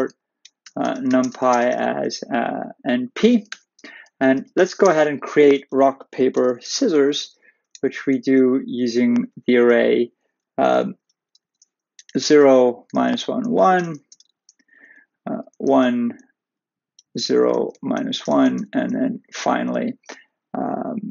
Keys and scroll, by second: 3.5 shift+Return, 11.6 Left, 18.0 Right, 19.2 Left.